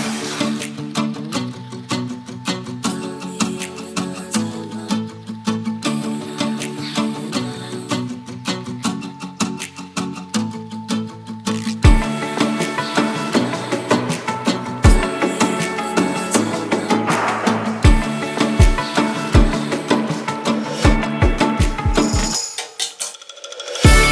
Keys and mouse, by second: 0.0-0.4 drag, 1.1 Tab, 1.6 shift+middle drag, 2.5 click, 3.8 shift+click, 5.1 click, 5.5 shift+middle click, 5.9-6.8 middle drag, 7.1 shift+middle drag, 7.6 middle click, 8.6 shift+middle drag, 9.4 shift+middle click, 10.9 ctrl+r, 16.6 click, 17.1 shift+click, 18.4 ctrl+r, 20.1 ctrl+b.